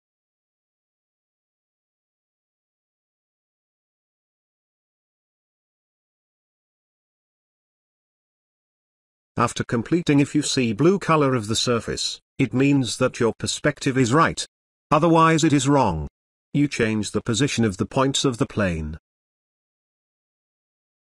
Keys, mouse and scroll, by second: 4.3 click, 9.4 click, 10.5-11.0 scroll down 1, 13.2-15.4 drag, 16.1 ctrl+z, 16.6 scroll down 1, 18.4-20.0 drag, 20.1 scroll down 1, 20.5 space, 20.7-21.1 ctrl+click.